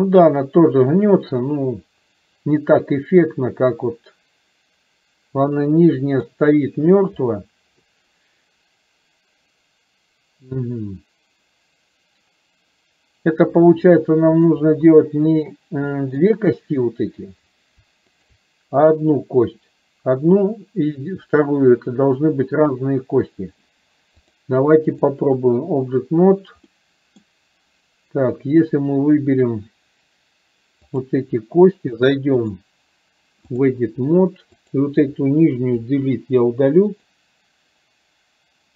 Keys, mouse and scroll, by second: 14.1-14.7 shift+middle drag, 15.9 scroll up 1, 16.2 middle click, 18.2 shift+click, 24.4-25.2 drag, 26.8 middle click, 32.4-33.8 drag, 34.7 click.